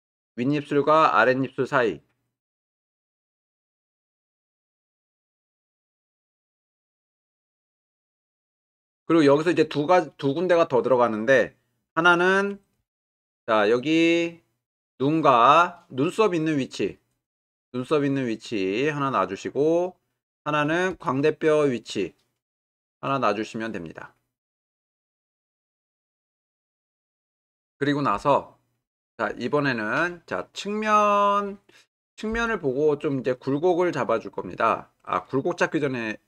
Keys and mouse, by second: 0.0 ctrl+r, 4.1-5.7 drag, 12.8 ctrl+r, 19.1-20.6 right drag, 20.9 ctrl+r, 23.1 right click.